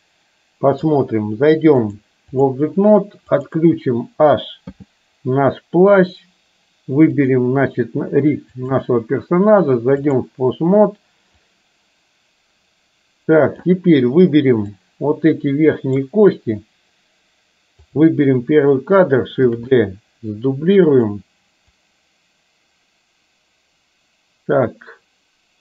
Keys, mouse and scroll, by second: 1.9 click, 4.7 h, 8.7-10.3 drag, 11.5-13.7 drag, 14.8-16.2 drag, 17.9 click, 19.5 shift+d, 21.8-25.6 drag.